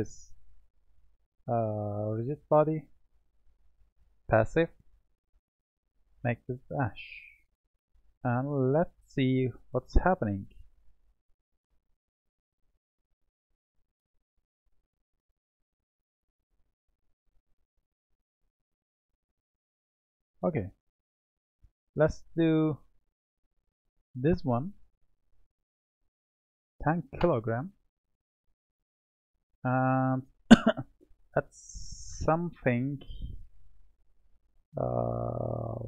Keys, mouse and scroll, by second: 2.1-7.1 drag, 7.1-7.7 scroll down 2, 7.7-10.7 middle drag, 12.3-14.2 drag, 14.2-14.9 middle drag, 14.9-16.1 scroll up 4, 16.1-17.1 middle drag, 17.1-17.8 scroll down 1, 17.8-19.2 scroll down 3, 19.2-20.7 middle drag, 20.7-24.0 drag, 25.5-28.6 drag, 29.6-31.9 middle drag, 31.9 click, 33.7 click.